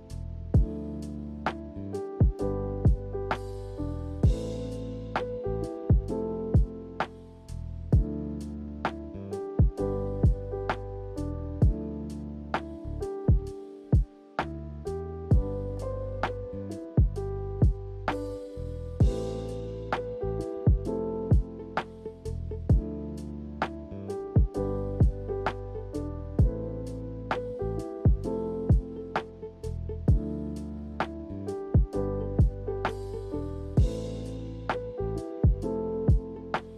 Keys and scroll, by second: 15.9 z, 34.9 z.